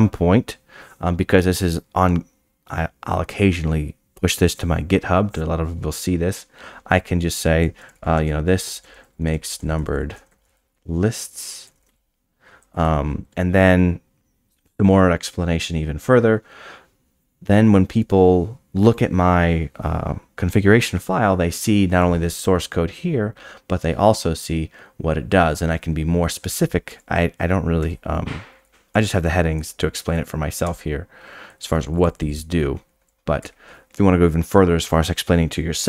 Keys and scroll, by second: 4.8 scroll down 8, 7.8-12.1 typing, 19.9 scroll down 8, 26.9 Tab, 27.8 Tab, 28.9 Tab, 30.6 Tab, 33.4 Tab.